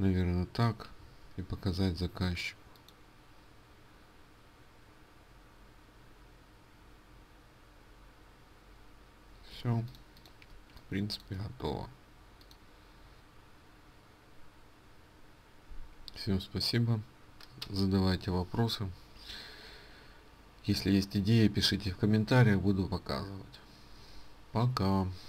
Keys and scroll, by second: 9.3 ctrl+space.